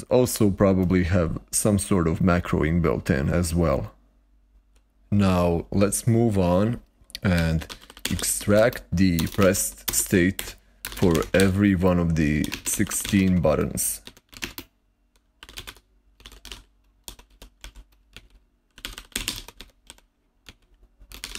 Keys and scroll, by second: 7.0-21.3 typing.